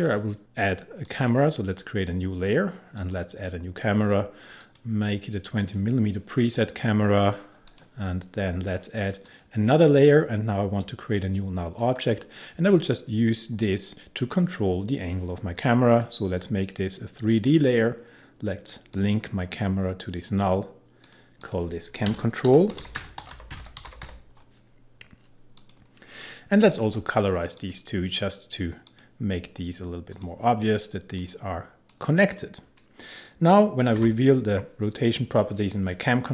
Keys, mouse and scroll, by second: 1.1 click, 11.8 click, 17.3-21.0 drag, 22.1 Return, 22.2-24.4 typing, 25.6 click, 34.0 r.